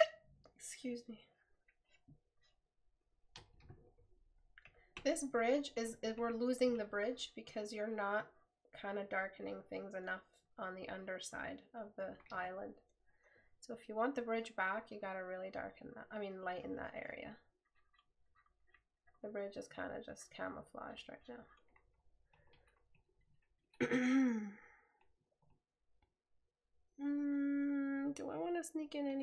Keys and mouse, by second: 3.8 right click.